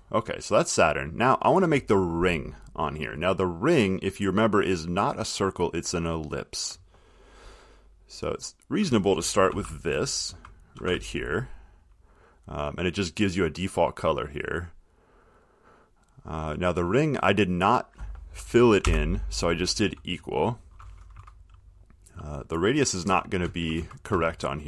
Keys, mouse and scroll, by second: 9.0 click, 9.7 ctrl+c, 10.4 click, 11.0 ctrl+v, 12.3 click, 15.4 click, 19.0 =, 21.3 Right, 23.2 Left, 23.8 Right, 23.9 Right.